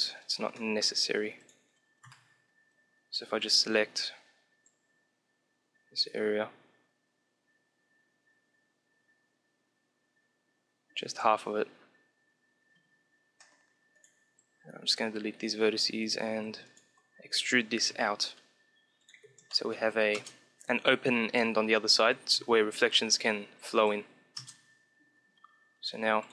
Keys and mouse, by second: 0.6 middle click, 1.5-2.6 middle drag, 1.9 KP_7, 2.6-5.0 drag, 3.5 c, 14.1 x, 15.8 a, 16.3 a, 16.5-18.4 right drag, 17.2 e, 19.0 click, 19.0 Tab, 19.4 middle click, 20.0 KP_0, 20.3 middle click, 21.9 KP_1, 22.2 Tab, 23.0-24.7 drag, 24.3 KP_0, 24.9 Tab, 26.1 click.